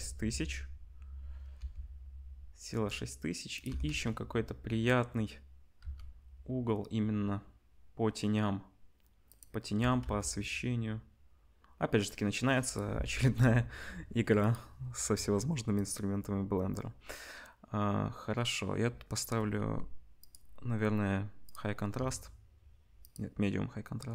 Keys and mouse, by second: 1.6 r, 3.7-6.1 middle drag, 3.7 r, 9.8 r, 10.2-12.8 middle drag, 14.4 click, 15.7 click, 19.1-24.1 drag.